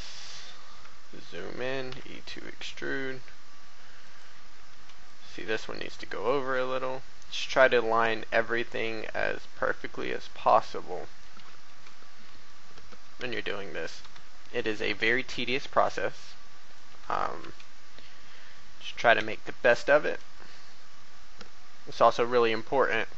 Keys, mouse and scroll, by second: 0.4-0.8 scroll up 1, 1.0 shift+middle click, 4.0-11.3 drag, 4.4 a, 4.7 b, 11.3-11.6 typing, 11.8 click, 13.1 e, 14.0 y, 16.6 click, 17.0 a, 17.4 b, 19.1 e, 20.5 x.